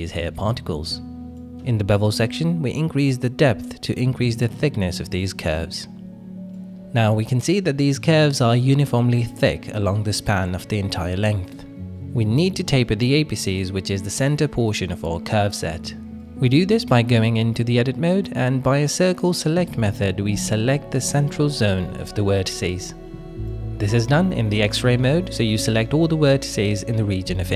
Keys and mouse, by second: 0.3 middle click, 1.1-5.7 shift+drag, 6.5 middle click, 7.1 click, 7.6 middle click, 8.4 middle click, 9.0 middle click, 9.7 KP_1, 10.9 /, 11.8 shift+middle drag, 13.7 Tab, 14.9 alt+z, 15.7 click, 18.0 c, 23.6 click, 24.0-26.2 middle drag, 26.2 click, 26.8-27.5 drag, 26.8-27.5 middle drag.